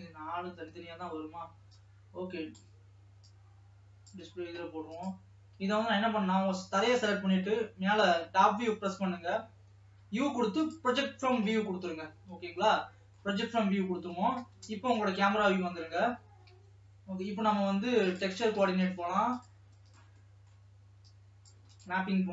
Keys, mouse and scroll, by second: 0.1 click, 0.5 scroll up 2, 2.0-4.6 drag, 6.0 Tab, 6.8-7.7 scroll down 1, 7.7 KP_7, 8.7 scroll down 3, 10.7 u, 12.8 middle click, 13.6-14.2 scroll up 5, 14.8 KP_0, 16.4 alt+a, 16.8 Tab.